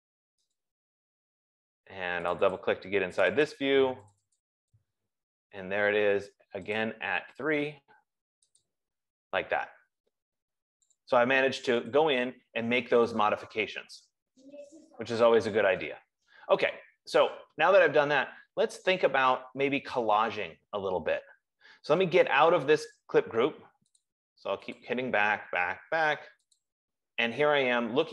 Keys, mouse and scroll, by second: 0.9 click, 2.7 click, 3.0 click, 3.6 click, 3.8 click, 4.4 click, 7.1 click, 8.9 click, 11.4 click, 12.3 click, 18.7-21.0 scroll, 21.0 scroll, 24.5 click, 25.4 click, 26.8 click.